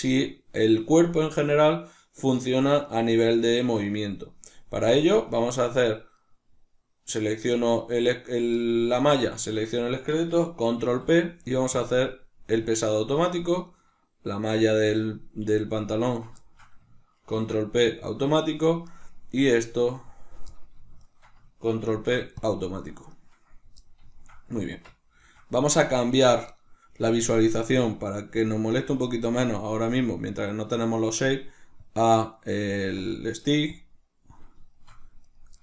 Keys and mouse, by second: 3.4-6.0 ctrl+middle drag, 6.0 right click, 9.1 shift+right click, 10.7 ctrl+p, 12.5-13.6 middle drag, 13.6 right click, 17.2 ctrl+p, 17.2-18.8 middle drag, 18.8 right click, 20.9 shift+right click, 21.8 ctrl+p, 23.0 right click, 24.1-28.3 shift+middle drag, 24.5 Tab, 28.3-34.6 drag, 34.6-35.2 shift+middle drag, 35.2 right click.